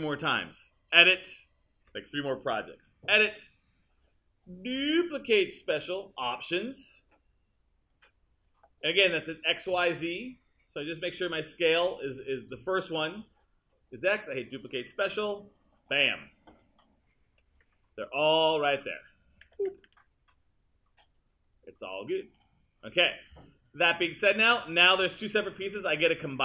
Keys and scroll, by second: 17.3 w, 19.5 super+z.